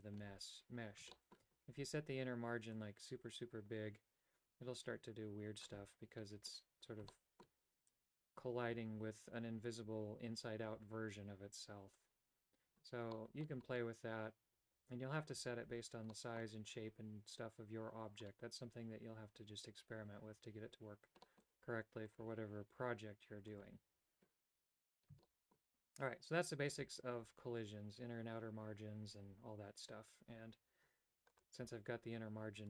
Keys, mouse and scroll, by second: 1.2 shift+middle click, 2.9-5.8 drag, 7.2 shift+middle click, 13.3 middle click, 16.2 middle click, 21.3 middle click, 22.2 right click, 23.7 click, 25.4 shift+middle click, 31.5 right click.